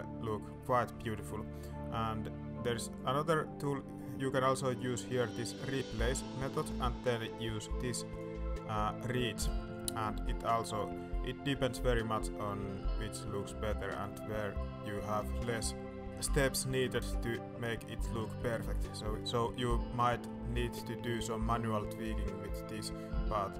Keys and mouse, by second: 0.3 middle click, 2.9 right click, 5.5-8.2 right drag, 10.0 middle click, 10.7 middle click, 11.5 middle click, 12.2 middle click, 13.4-14.6 middle drag, 14.8 middle click, 15.8 middle click, 16.1 middle click, 17.7 middle click, 18.4 middle click, 19.5 middle click, 20.3 middle click, 20.6 shift+middle click, 21.3 middle click, 21.8-23.3 middle drag.